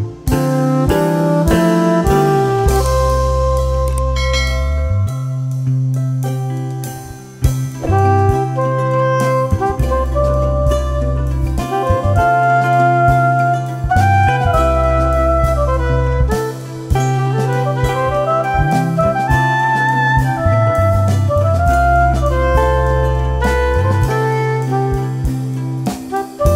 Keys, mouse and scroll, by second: 2.6 shift+Page_Up, 4.5 click, 5.5 right click, 6.6-8.1 drag, 9.1 F3, 9.6-11.8 drag, 11.8 F2, 12.0-13.4 drag, 14.5 shift+Page_Up, 15.6 click, 15.8 F2, 16.0-20.9 drag, 21.5 F3, 21.9 F2, 22.6-24.6 drag, 24.6 F4.